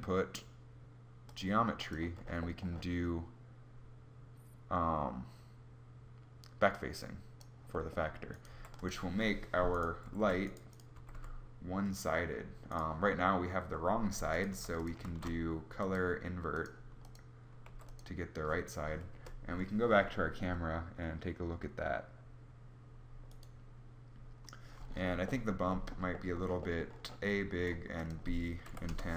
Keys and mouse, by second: 8.0 g, 9.5 r, 10.5 r, 14.1 g, 14.5 shift+a, 17.2 g, 18.6 KP_0, 19.4 g, 19.4 KP_0.